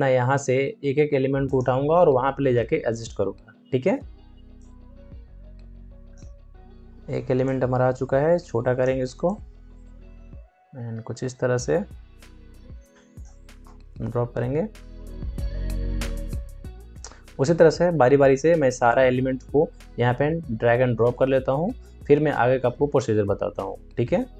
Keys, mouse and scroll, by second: 4.5 shift+Num_Lock, 4.5-13.6 shift+drag, 13.6 shift+Return, 14.0 shift+Up, 17.7 shift+Down.